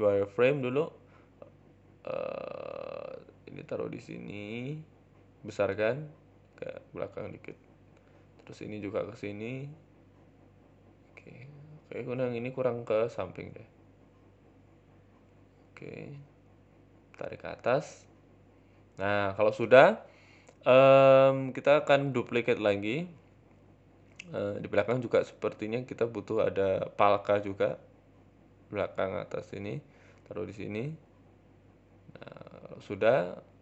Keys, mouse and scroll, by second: 0.2 z, 1.2 s, 2.0-2.4 scroll up 3, 2.2 Tab, 2.4 shift+middle click, 2.9 a, 4.3 g, 5.2 s, 6.0 g, 7.7 s, 8.0 shift+middle click, 8.4 shift+d, 11.3 shift+middle click, 12.0 click, 13.3 g, 15.8 middle click, 16.1-16.6 scroll down 2, 16.6 Tab, 16.8 shift+middle click, 17.1 g, 18.3 z, 18.9 scroll up 4, 19.5 g, 20.5 middle click, 20.7-21.2 scroll down 6, 21.2 KP_7, 21.7 scroll up 3, 21.8 shift+middle click, 24.5 KP_1, 25.1 Tab, 25.5 shift+middle click, 26.0 middle click, 26.7-31.1 typing, 32.7 s, 33.2 g.